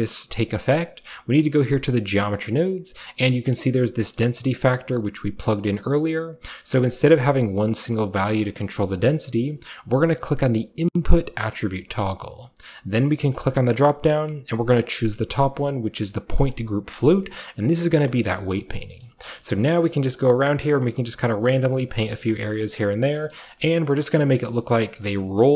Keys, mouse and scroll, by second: 4.1-5.9 middle drag, 4.3 click, 5.7 click, 6.9-8.8 drag, 11.3 click, 13.2 click, 16.3 click, 17.6 click, 17.8 click, 18.3 click, 18.5 click, 18.8-20.6 drag, 20.7-22.6 drag, 20.7-22.7 scroll up 1, 22.7 click, 22.8 click, 23.3 click, 23.5 click, 23.6 click, 23.8 click, 24.0-25.5 drag.